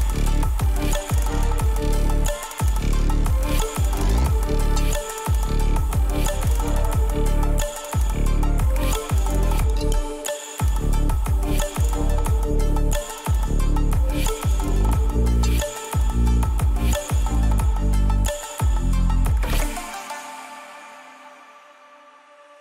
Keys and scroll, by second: 4.9 ctrl+=, 12.6 ctrl+=, 13.0 ctrl+], 17.9 ctrl+-.